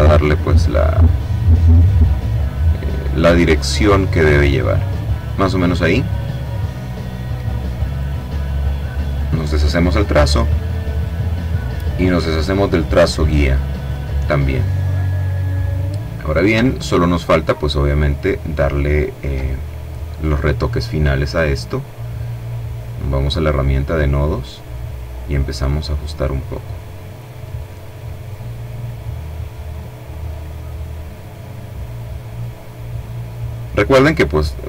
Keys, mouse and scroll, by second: 2.8-5.0 drag, 5.9 click, 7.5 click, 8.7 click, 11.3 click, 13.3 click, 16.3-17.0 ctrl+scroll up 1, 17.6-18.2 ctrl+scroll down 2, 18.3 ctrl+middle click, 19.7 click, 22.3 click, 24.5-25.7 drag, 26.2-27.5 drag, 27.7-30.5 drag, 31.1-32.5 drag, 32.6-33.7 drag, 34.1-34.6 drag.